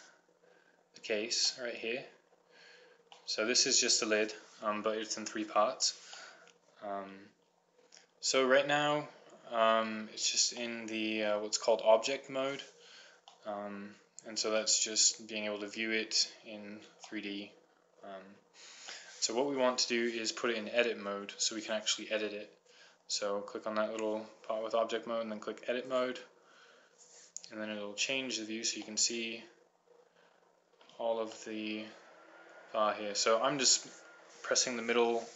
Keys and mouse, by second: 0.9 middle click, 1.8-3.3 middle drag, 12.7 middle click, 29.4-31.1 middle drag, 31.8 middle click, 33.5-35.3 middle drag.